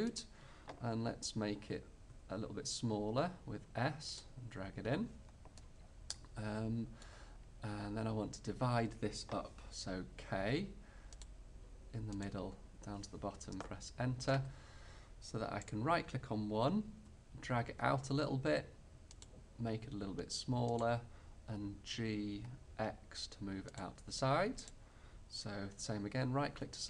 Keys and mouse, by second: 0.3-2.1 drag, 2.2 s, 4.3-5.4 drag, 7.9-10.2 middle drag, 10.2 k, 15.7-17.3 middle drag, 17.1 e, 19.9 s, 22.1 g, 26.6 e.